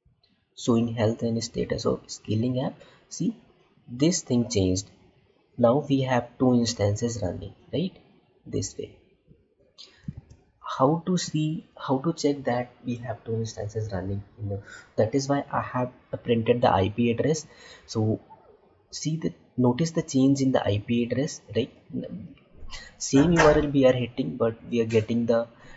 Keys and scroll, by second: 10.5 alt+Tab.